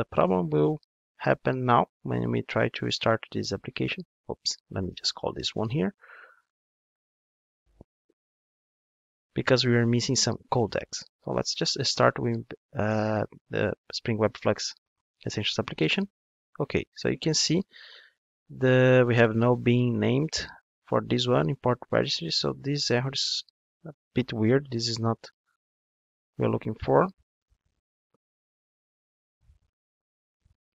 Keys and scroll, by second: 7.2 Return, 10.6 ctrl+d.